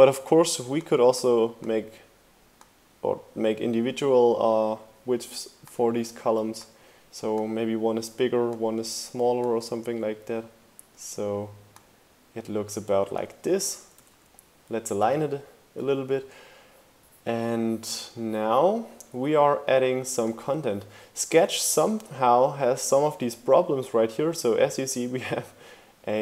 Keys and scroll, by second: 13.8 Right.